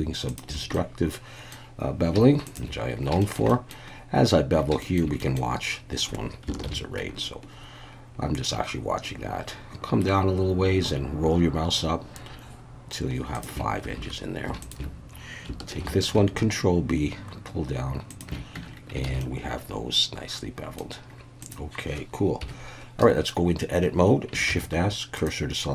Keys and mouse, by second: 0.7 middle click, 2.4 shift+click, 3.2 shift+middle click, 3.5 middle click, 4.8 shift+middle click, 5.2 middle click, 6.6 ctrl+b, 13.3 shift+click, 13.9 alt+a, 14.7 shift+click, 14.7 shift+a, 15.8 ctrl+b, 18.1 shift+click, 18.6 Tab, 19.1 alt+a, 19.2-20.8 middle drag, 21.4 drag, 22.4 KP_1, 23.0 Tab, 24.5 shift+s.